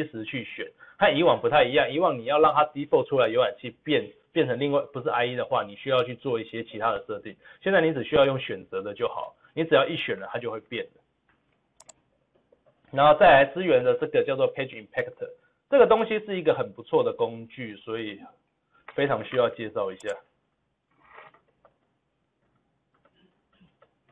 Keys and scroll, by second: 18.6 ctrl+v.